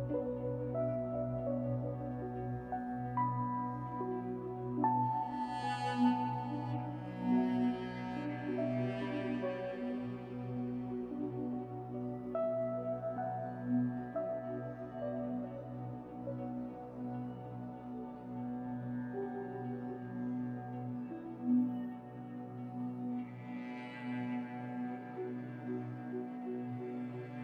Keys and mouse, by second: 0.1 click, 0.3 g, 1.7 click, 1.9 g, 3.5 click, 3.8 g, 6.4 ctrl+s, 17.3 click, 18.8 shift+middle click, 20.9 click, 21.5 click, 23.4 alt+z, 24.1 alt+z, 25.3 click, 26.9 g.